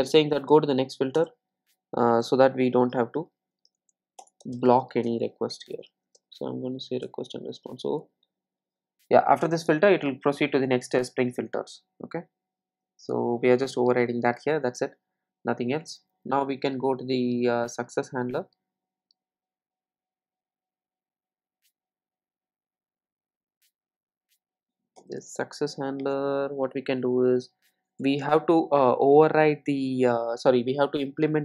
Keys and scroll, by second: 1.2 Return, 9.1 Return.